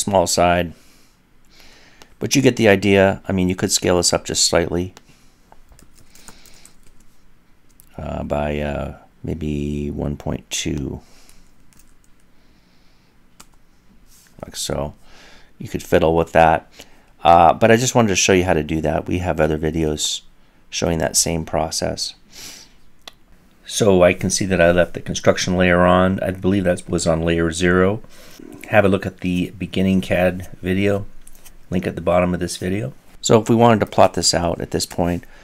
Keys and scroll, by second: 19.8 typing, 21.8 typing, 24.6-25.3 typing.